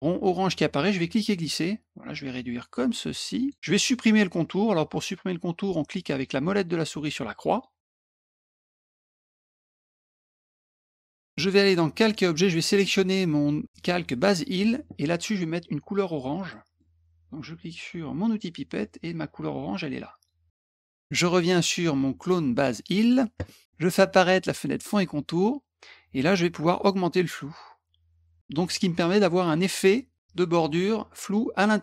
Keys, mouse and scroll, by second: 1.1-3.5 drag, 7.5 middle click, 12.0 click, 14.2 click, 16.5 middle click, 18.2 click, 20.1 click, 22.8 click, 24.8 click, 26.8-28.6 drag.